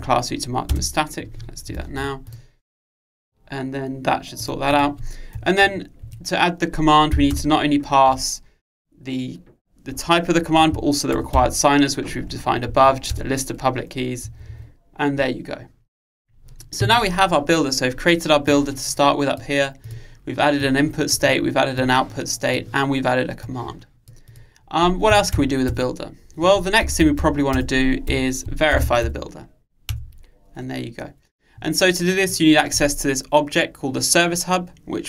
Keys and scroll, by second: 1.9 super+s, 13.2 Return, 27.6 Return.